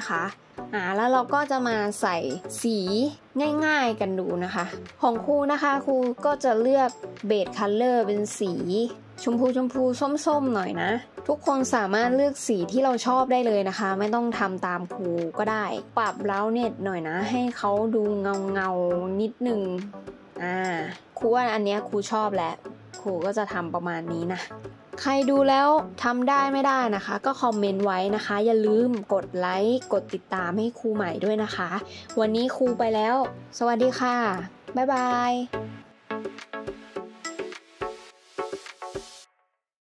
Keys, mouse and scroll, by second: 18.4 middle click.